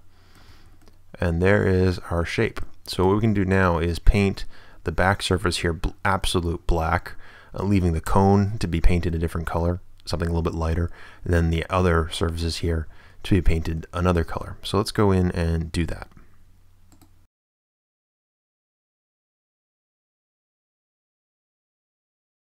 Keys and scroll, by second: 0.5 Tab, 3.3 Tab, 5.6 a, 12.8 Tab, 17.9 Tab, 18.5 ctrl+Return, 18.6 Tab, 18.9 a, 19.1 ctrl+n, 19.5 Tab, 20.7 Return, 21.7 a.